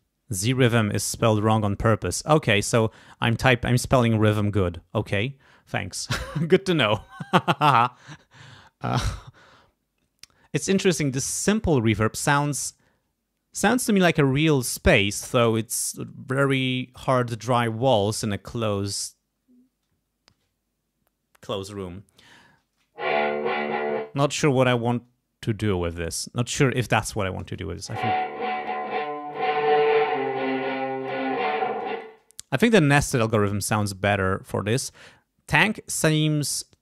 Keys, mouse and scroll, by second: 22.4 space, 23.9 space, 25.6 click, 27.4 space, 29.3-31.2 drag, 31.8 space.